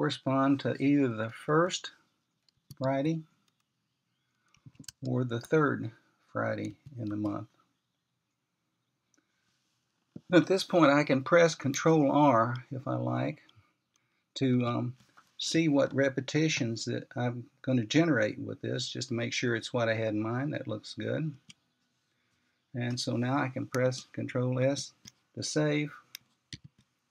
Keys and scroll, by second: 2.2-3.4 typing, 4.4 typing, 5.4 typing, 6.4 typing, 8.2-8.9 typing, 15.4 ctrl+r, 22.4 Return, 25.4 ctrl+s.